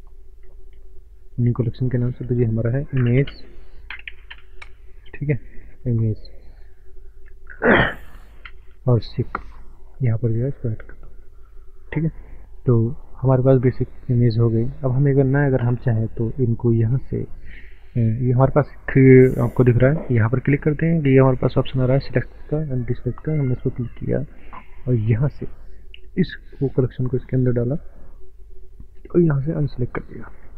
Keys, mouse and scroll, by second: 0.5 m, 1.3 click, 3.0-4.3 typing, 5.7 BackSpace, 6.2 e, 7.6 BackSpace, 8.5 e, 10.1 click, 12.7 click, 13.7 middle click, 13.7 middle click, 14.3 click, 14.3 click, 14.5 scroll up 1, 14.6 middle click, 16.7 click, 16.7 click, 22.5 click, 26.7 click, 30.1 middle click, 30.1 scroll down 1.